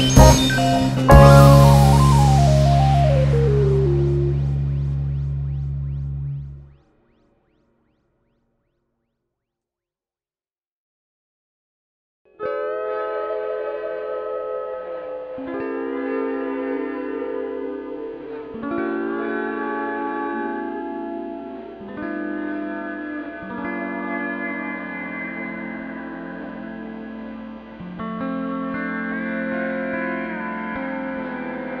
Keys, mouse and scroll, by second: 0.0 click, 0.2 scroll down 1, 0.4 `, 2.4 `, 2.9 click, 3.1 shift+click, 3.5-8.5 typing, 3.6 click, 4.2 click, 4.4 shift+click, 5.7 scroll down 1, 6.0 click, 7.0 click, 7.2 ctrl+x, 7.5 click, 7.6 shift+click, 8.8 click, 10.0 alt+a, 10.2-10.9 scroll down 1, 11.2-11.6 scroll up 1, 11.6 2, 11.8 click, 12.2 shift+click, 12.7 f, 13.9 ctrl+r, 15.2 scroll up 2, 15.9 click, 16.8 f, 17.0 click, 17.3 shift+click, 17.5 f, 17.8 Tab, 18.0 scroll down 2, 20.4 click, 20.7 shift+click, 20.8 f, 21.6-21.9 scroll up 1, 22.3 scroll up 1, 23.2 click, 24.2 shift+click, 25.0 f, 25.2-25.8 scroll up 1, 26.4 1, 26.6 2, 26.8 click, 27.5-28.7 right drag, 27.8 KP_1, 28.5 1, 28.7 click, 29.0 g, 30.3-31.8 typing, 30.5 click, 31.0 click.